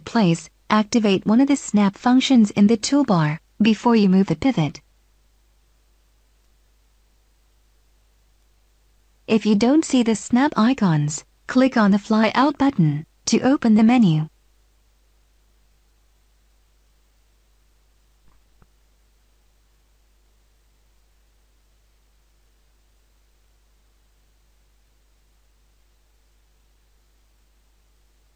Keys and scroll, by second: 19.5 Insert, 27.4 Insert.